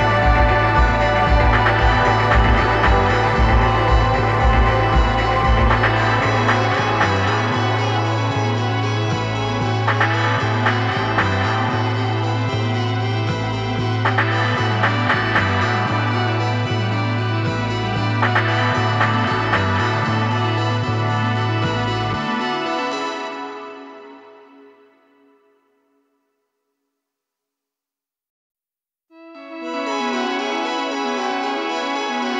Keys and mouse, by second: 3.3-5.2 drag, 11.5-14.4 drag, 18.0-20.0 drag, 23.4-25.2 drag, 29.1 KP_3, 31.5 KP_5.